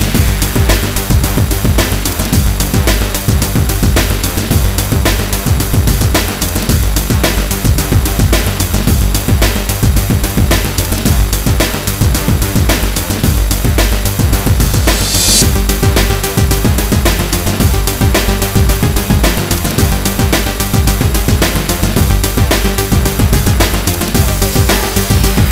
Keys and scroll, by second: 13.4 i.